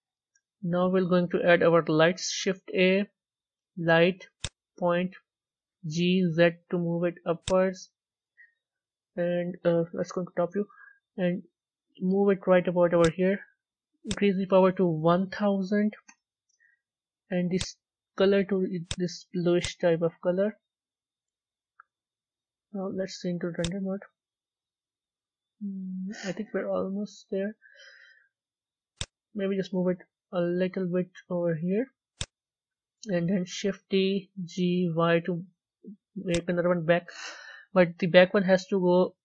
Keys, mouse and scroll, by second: 1.0 a, 5.7 g, 9.8 KP_7, 11.1 g, 16.0 KP_0, 18.7 click, 21.6-23.2 middle drag, 23.2 z, 23.4 click, 24.5 a, 24.9-28.9 middle drag, 28.9 click, 30.4 g, 33.7 shift+d, 36.8-39.1 middle drag, 39.1 g.